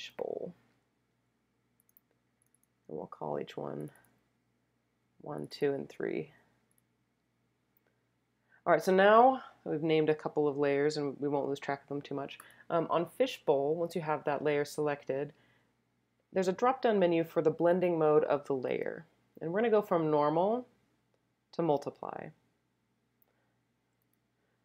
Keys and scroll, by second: 0.0-0.7 typing, 3.2 1, 5.0 2, 6.3 3.